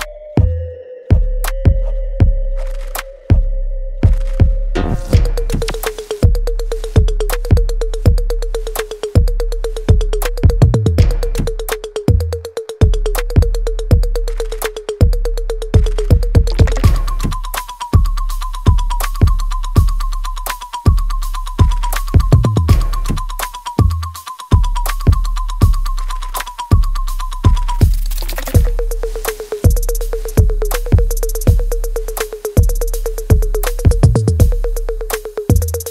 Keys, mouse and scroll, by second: 2.0 right click, 2.7 alt+click, 3.3 alt+middle click, 5.9 alt+right click, 6.3 alt+click, 7.3-9.0 alt+right drag, 9.0 click, 11.7-13.5 alt+drag, 15.2-17.5 alt+drag, 18.5 right click, 19.4 click, 22.4-23.9 alt+drag, 23.9 right click, 24.8-26.6 alt+drag, 26.6 right click, 28.4 click, 29.3-31.0 shift+right drag, 31.0-33.1 drag, 33.1-35.8 alt+drag, 35.8 alt+right click.